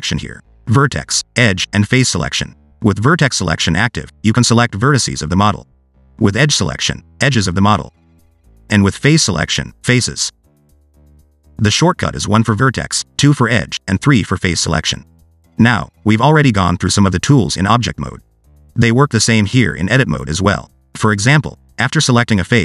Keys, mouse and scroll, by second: 1.9 click, 2.6 click, 3.8 click, 4.9 click, 5.2 scroll up 2, 5.8 click, 6.2 click, 7.5 click, 8.3 click, 8.7 click, 9.1 click, 10.0 click, 10.3 click, 10.5 click, 10.8 click, 11.4 click, 13.0 1, 13.5 2, 14.0 3, 22.0 g.